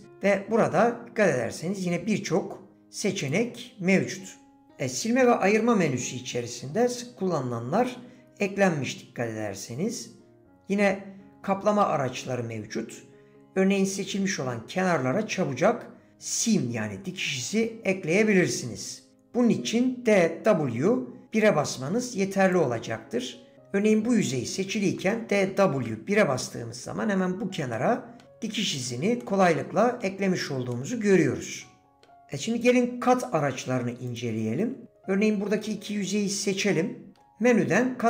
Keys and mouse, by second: 3.2 click, 27.7 middle click, 28.8 click, 29.2 middle click, 30.7-32.0 middle drag, 32.7-34.0 drag, 34.1 shift+click.